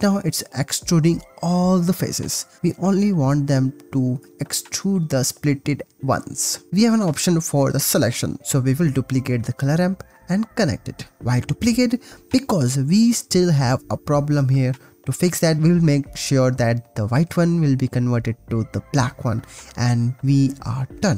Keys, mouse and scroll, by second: 0.7 0, 6.2 click, 7.3 click, 7.7 click, 7.9 shift+d, 8.4-10.3 drag, 11.6-13.7 drag, 15.1 click, 15.9 click, 16.5 click, 19.4 shift+middle click, 20.3-20.7 middle drag, 21.0 shift+middle drag.